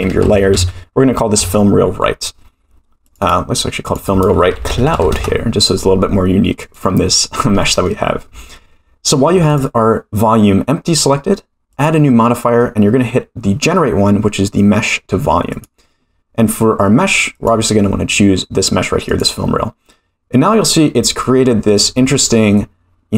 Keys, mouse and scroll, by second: 3.1 click, 3.2-5.7 drag, 6.6 click, 7.6 middle drag, 9.5 click, 11.7-15.6 drag, 17.3 click, 21.2-21.7 scroll down 3, 21.7-23.1 middle drag.